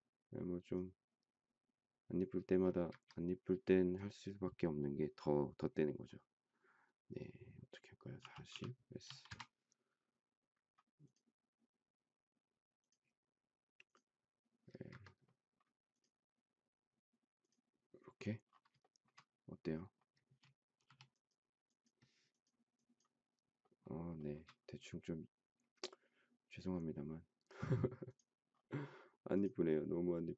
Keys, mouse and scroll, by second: 2.7 Escape, 8.2-9.3 typing, 14.6 Escape, 18.8 shift+middle click, 20.8 e, 24.2 shift+middle click.